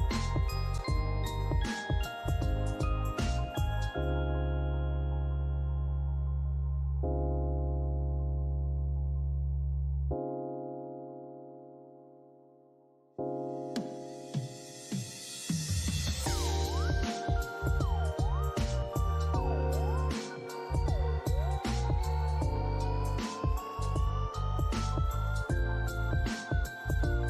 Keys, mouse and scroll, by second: 0.2 alt+middle click, 1.0 scroll down 1, 3.8 alt+middle click, 4.2 scroll down 1, 5.8 scroll up 1, 9.4 middle click, 11.1 alt+click, 12.5 alt+middle click, 14.1 double click, 18.5 scroll down 1, 20.5 alt+click, 22.2-22.6 scroll down 3, 22.9 alt+middle click, 23.3 alt+click, 26.6 alt+middle click.